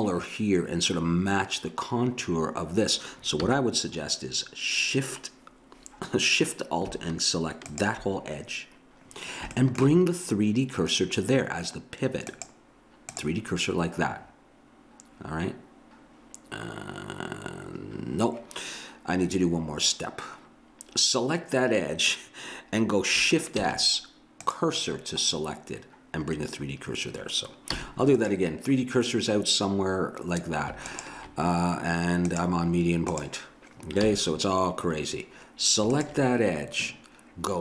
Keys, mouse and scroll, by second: 3.4 a, 7.7-9.6 drag, 12.3-14.2 drag, 14.2 middle click, 23.6 shift+s, 27.8 a, 29.2-30.2 right drag, 30.9 click, 34.0 a, 36.0-37.6 drag.